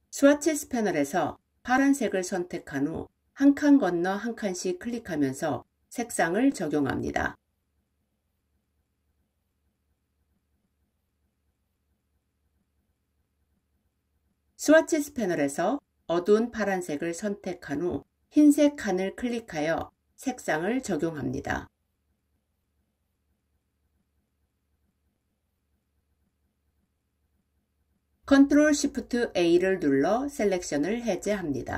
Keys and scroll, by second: 28.2 ctrl+shift+a.